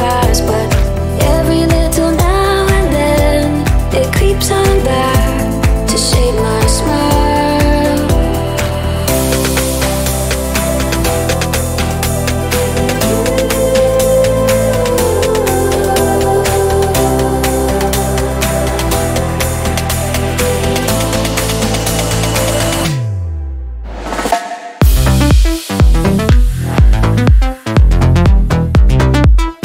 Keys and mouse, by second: 1.6 click, 3.1 click, 3.7 ctrl+a, 8.3-12.6 drag, 12.6-15.2 middle drag, 15.2-16.2 drag, 16.2-17.3 middle drag, 17.3 ctrl+a, 23.8 drag, 25.2 ctrl+a, 27.3 BackSpace.